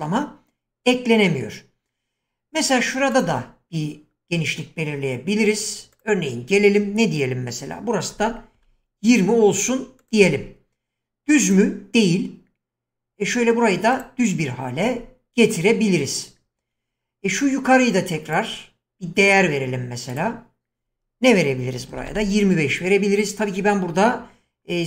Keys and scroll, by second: 8.1-8.5 typing, 21.6-22.6 typing.